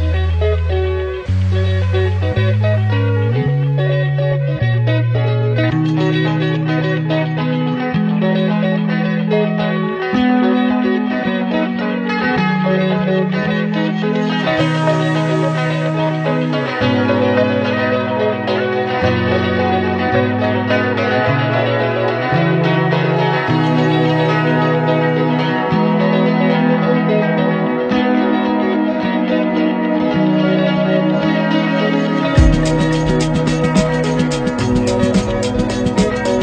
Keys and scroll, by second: 1.1 ctrl+=, 14.4 ctrl+0, 21.7 Up.